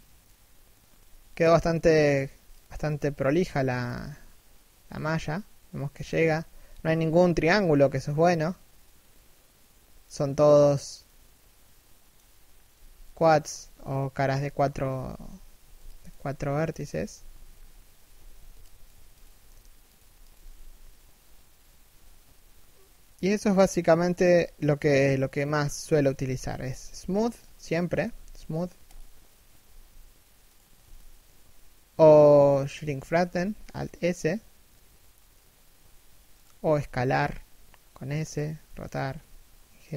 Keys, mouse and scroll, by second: 0.9 right click, 1.7 g, 2.5 right click, 2.8 g, 4.6-5.3 scroll up 1, 6.3 z, 7.3 scroll down 1, 7.7 shift+middle click, 7.9 middle click, 12.1-13.0 scroll down 1, 13.0 3, 13.2 1, 14.7 z, 15.2 a, 15.3 b, 17.7 z, 17.9 a, 18.1 b, 24.7 shift+middle click, 25.9 scroll up 1, 26.1 a, 26.8 alt+right click, 27.6 w, 29.2 s, 32.9 alt+s, 36.2 s.